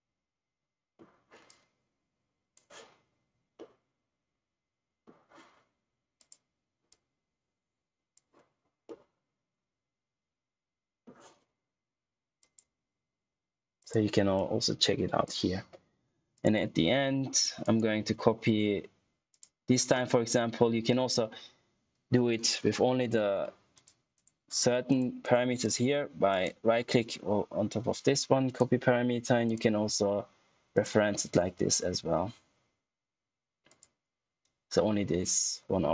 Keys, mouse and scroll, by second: 1.4 click, 3.5 middle click, 5.1 typing, 6.1 click, 7.1 click, 8.1 typing, 8.8 middle click, 12.3 click, 14.6 click, 17.6 right click, 19.2 click, 22.9 click, 26.2 right click, 28.4 click, 30.7 right click, 33.6 click.